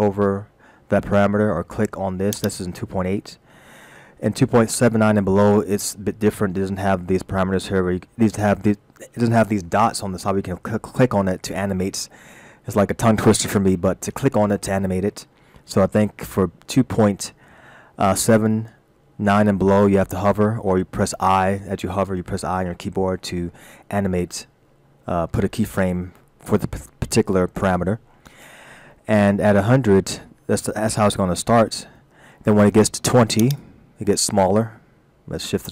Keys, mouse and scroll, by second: 2.4 click, 33.5 click.